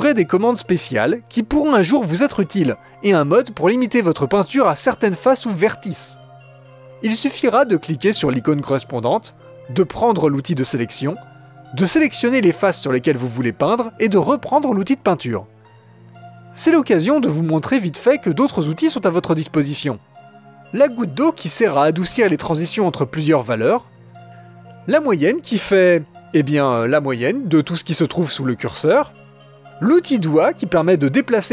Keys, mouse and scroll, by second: 0.0-5.9 drag, 6.0 click, 8.6-11.2 drag, 13.2 click, 14.8-18.0 drag, 18.0-19.4 middle drag, 20.3 click, 20.7 middle click, 21.0-21.6 scroll down 1, 21.6-25.5 drag, 25.5 middle click, 25.9-29.1 drag, 29.3-30.5 drag, 30.5 middle click, 30.8-31.3 scroll up 1, 31.3 click.